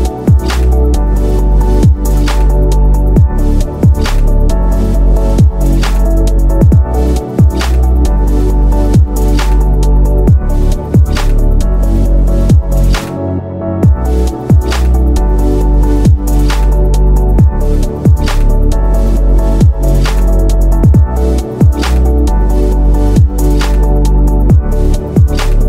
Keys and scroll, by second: 24.7 ctrl+alt+g.